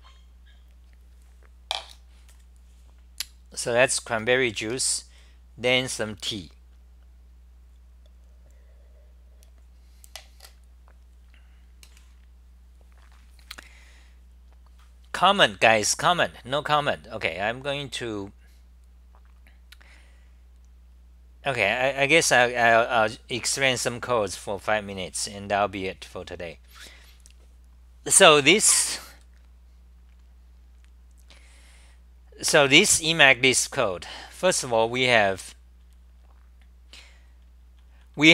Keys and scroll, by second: 28.5 d, 33.0-34.5 typing, 36.0 c, 37.7 c, 37.9 c.